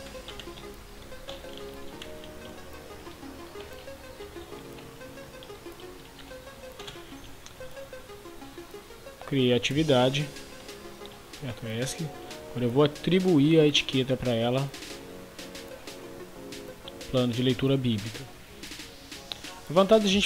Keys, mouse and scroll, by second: 0.0-6.7 typing, 6.7 Return, 11.0 Escape, 11.7 click.